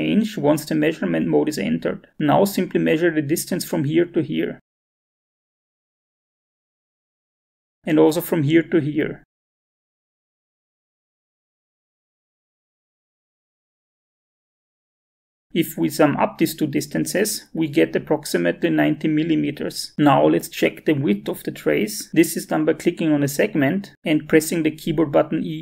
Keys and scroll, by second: 14.6 Escape, 25.2 e.